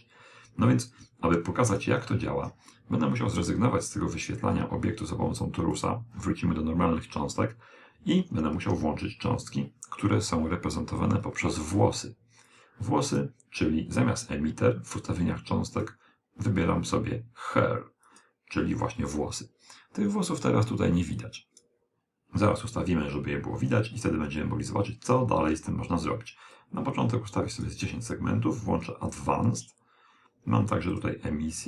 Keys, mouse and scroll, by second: 3.1 click, 9.7 click, 13.0 click, 18.4 click, 23.8 click, 26.4-29.9 drag, 30.6-31.6 drag.